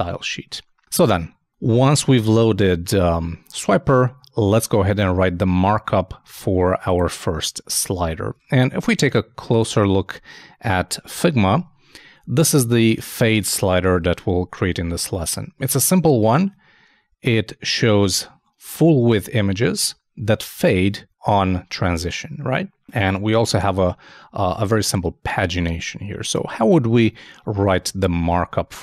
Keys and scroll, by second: 8.3 super+Tab, 28.5 super+Tab.